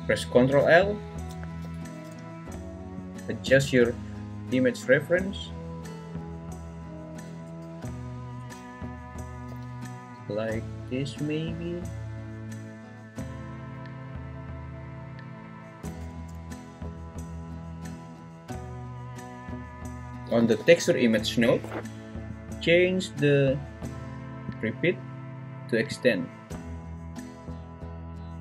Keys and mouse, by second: 0.6 l, 1.6 g, 3.0 click, 3.4 s, 5.1 click, 7.4 s, 8.4 click, 9.6 g, 15.6 click, 16.1 s, 20.1 g, 20.6 g, 24.5-25.9 drag.